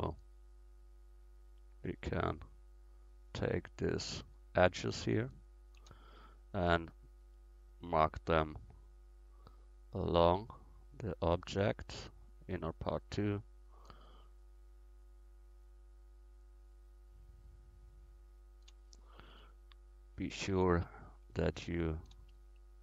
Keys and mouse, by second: 4.5-7.0 right drag, 6.0-13.6 middle drag, 13.6-19.7 right drag, 18.9 middle click, 19.7 middle click, 22.3-22.8 right drag.